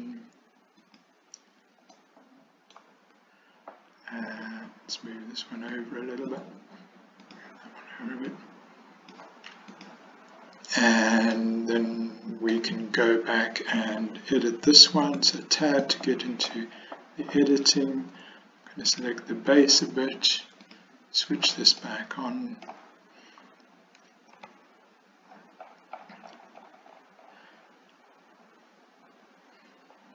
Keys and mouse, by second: 2.0 middle click, 2.4 click, 2.4 right click, 4.4 click, 5.9 click, 7.4 click, 8.4 click, 11.4-12.6 middle drag, 15.1 Tab, 15.9-16.6 middle drag, 19.0 alt+click, 20.7 click, 21.8 middle click, 24.4 s.